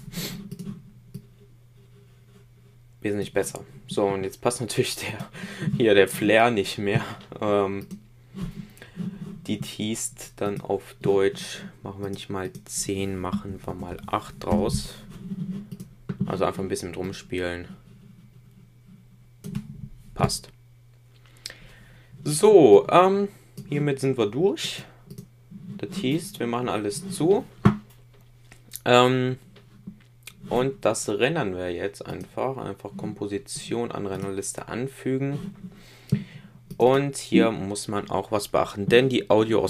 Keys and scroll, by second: 13.2 Right.